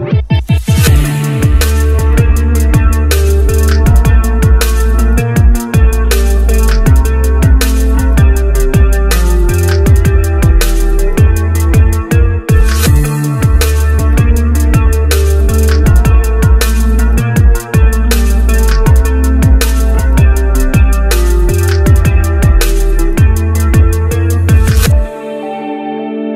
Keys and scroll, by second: 22.8 shift+space.